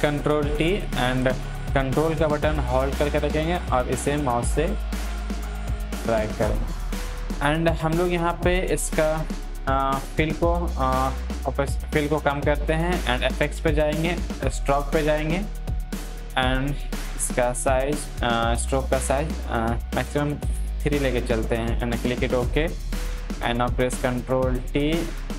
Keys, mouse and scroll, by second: 3.1-6.5 ctrl+drag, 6.8 click, 10.2 click, 10.2-13.2 drag, 17.4-21.5 drag, 23.2 ctrl+t, 24.2 click, 24.9-25.3 drag.